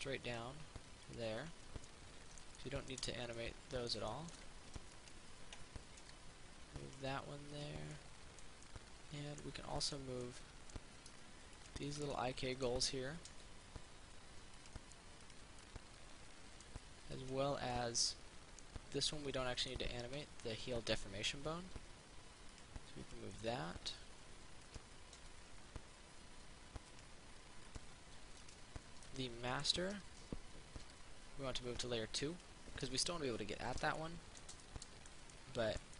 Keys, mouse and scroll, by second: 0.5 click, 2.1 middle click, 5.2 right click, 6.2 m, 7.0 click, 8.2 middle click, 9.9 right click, 10.4 middle click, 11.8 shift+right click, 12.4 middle click, 13.6 m, 14.8 click, 15.8 middle click, 17.4 right click, 18.0-20.9 middle drag, 22.0 m, 22.8 click, 23.6 middle click, 24.9 right click, 27.2 click, 28.6 right click, 29.3 middle click, 31.0 m, 31.9 click.